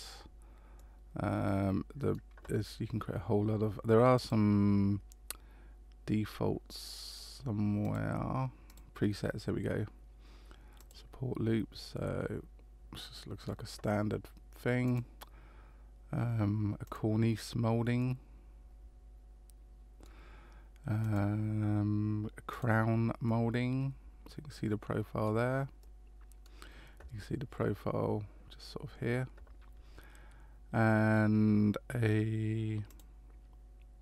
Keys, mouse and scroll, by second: 0.7 middle click, 4.1 click, 7.8 click, 8.7 click, 11.7 middle click, 14.8 click, 18.0 middle click, 21.0 click, 23.2 middle click, 25.8 middle click, 32.9 click.